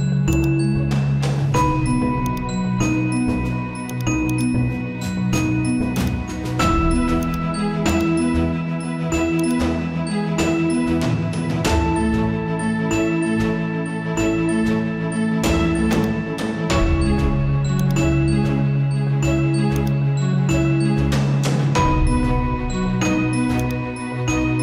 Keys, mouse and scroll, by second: 3.4 right click, 3.9-10.2 drag, 10.2-11.0 scroll up 1, 13.0-13.6 scroll down 1, 15.9-19.1 alt+drag, 19.1-19.7 scroll up 1, 19.8 alt+click, 20.2-21.1 alt+scroll up 1, 23.6-24.6 drag.